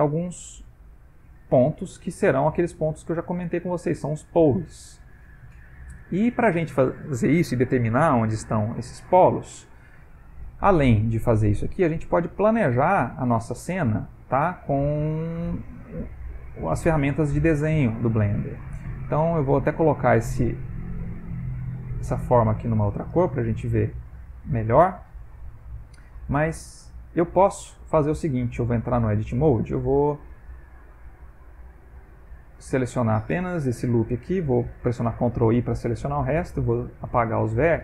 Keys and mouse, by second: 2.7 shift+middle click, 5.4 middle click, 6.8 middle click, 8.5 middle click, 10.1 middle click, 10.7 ctrl+middle click, 11.6 ctrl+middle click, 12.2 ctrl+middle click, 12.7 middle click, 13.0 Tab, 13.4 middle click, 15.2 click, 16.2 click, 18.9 middle click, 19.6 middle click, 20.9 click, 21.6 click, 23.3 middle click, 25.2 middle click, 25.7 ctrl+middle click, 26.2 ctrl+middle click, 28.1 middle click, 28.7 Tab, 29.7 click, 29.8 click, 33.7 alt+click, 35.1 ctrl+i, 36.4 Delete.